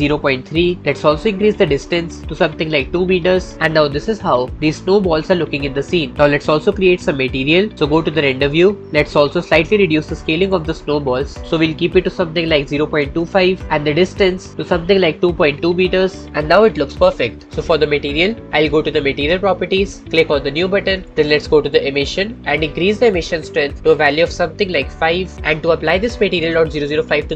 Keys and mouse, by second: 1.5-3.0 drag, 5.8-6.3 drag, 6.3-7.7 middle drag, 14.1-16.0 drag, 22.2 click, 23.4-25.0 drag.